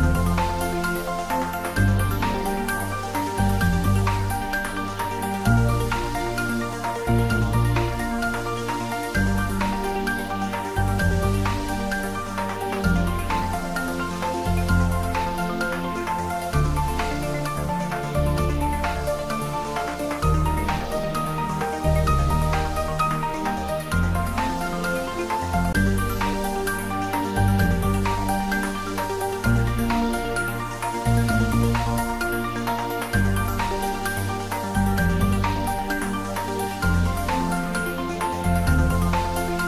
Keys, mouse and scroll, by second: 0.9-1.2 scroll down 1, 1.2-1.6 scroll up 1, 4.7-5.0 scroll up 1, 5.7 Tab, 6.6 click, 7.5 3, 7.8 click, 8.7 shift+click, 10.1 g, 10.6 z, 13.4 click, 14.0 Tab, 14.9-16.8 middle drag, 16.8 Tab, 17.8 click, 18.8 2, 19.1 click, 20.7-21.7 typing, 24.4 click, 25.0 Tab, 25.3-25.7 scroll down 1, 25.7-29.2 middle drag, 29.0-29.9 typing, 30.3 click, 30.6 middle click, 31.5 shift+a, 33.2 click, 33.8-34.6 scroll down 1, 34.6 s, 36.3 click, 36.8 scroll down 1, 36.9 middle click, 37.8-38.6 scroll up 1, 38.6 s.